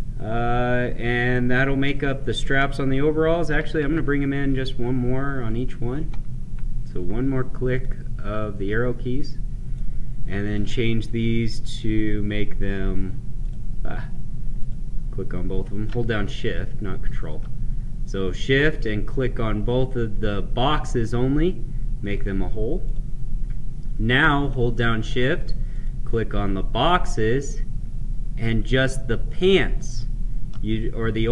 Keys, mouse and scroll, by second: 1.8 click, 3.8 Left, 5.4 click, 7.7 click, 9.1 right click, 10.4 click, 11.6 ctrl+click, 14.6 ctrl+click, 22.0 click, 22.9 click, 25.6 shift+click.